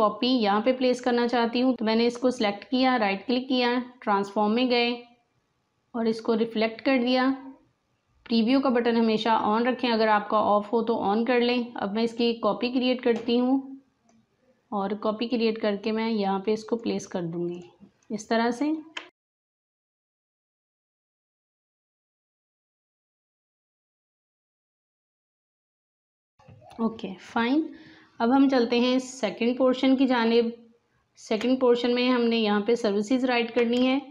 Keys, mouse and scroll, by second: 1.7 click, 2.7 right click, 6.0 click, 12.0-17.5 drag, 18.7 alt+scroll up 1, 19.1 click, 19.3 space, 19.5 click, 20.3-21.9 drag, 21.9 Down, 22.7 click, 23.4 click, 23.6 Right, 25.2 click, 25.4 alt+scroll down 1, 25.5 space, 25.6 click, 25.6 space, 26.1 alt+scroll down 1, 30.2 space, 30.3 click, 30.7 space, 31.5 space, 33.2 alt+scroll down 1, 33.7 space, 33.8 click.